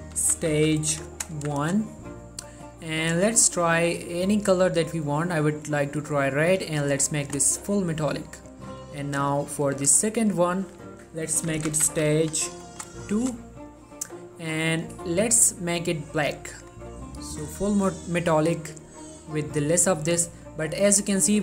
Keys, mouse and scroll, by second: 0.1-1.5 typing, 1.7 Return, 2.9 click, 3.3 middle click, 3.5-4.6 scroll up 2, 3.8 middle click, 4.6-7.8 drag, 7.8 scroll down 1, 7.9 middle click, 8.4-8.9 scroll up 1, 8.9 click, 11.5-13.2 typing, 13.3 Return, 14.7-20.1 drag, 20.1 middle click, 21.1-21.4 scroll up 1.